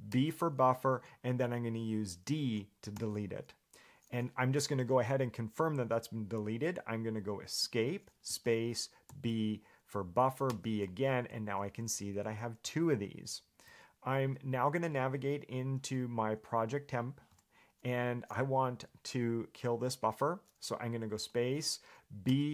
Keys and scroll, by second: 7.8 Escape, 11.7 ctrl+j, 12.1 ctrl+k, 12.4 ctrl+j, 12.8 ctrl+k, 17.5 Return.